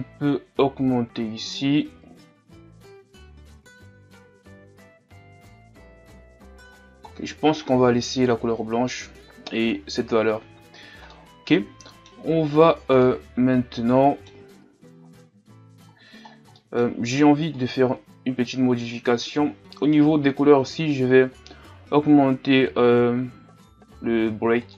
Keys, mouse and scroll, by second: 2.8 click, 4.8 click, 6.3 click, 7.1-7.6 scroll down 1, 7.6-10.6 middle drag, 10.6-11.1 scroll down 1, 11.1-12.5 middle drag, 12.5-13.0 scroll up 4, 13.0-24.7 middle drag.